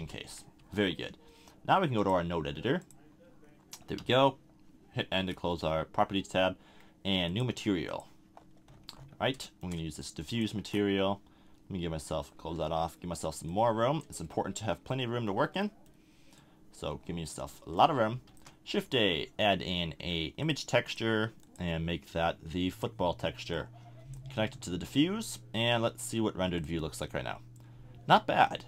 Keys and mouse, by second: 0.3 a, 0.6 Tab, 3.5 drag, 4.0 n, 9.5-12.4 drag, 12.4 t, 14.3-15.5 drag, 16.4-17.3 drag, 17.5-18.3 drag, 18.3 shift+a, 27.9-28.5 middle drag.